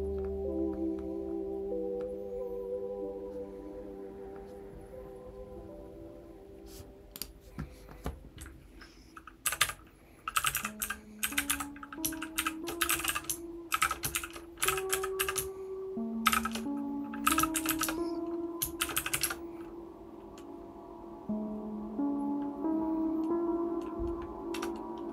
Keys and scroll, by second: 9.6-18.3 typing, 25.0-25.1 typing.